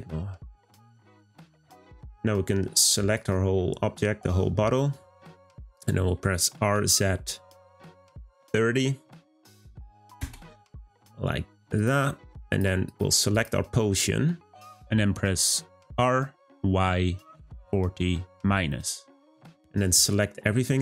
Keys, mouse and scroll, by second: 1.9 click, 11.8 click, 12.5 click, 12.9 click, 13.3 click, 15.7 r, 19.9 click, 20.1 click.